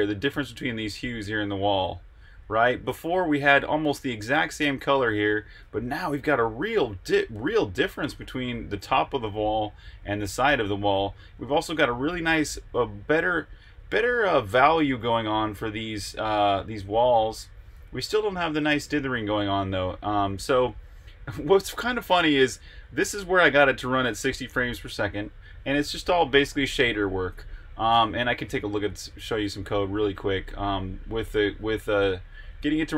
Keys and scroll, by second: 28.2 super+Tab, 30.0-31.2 typing.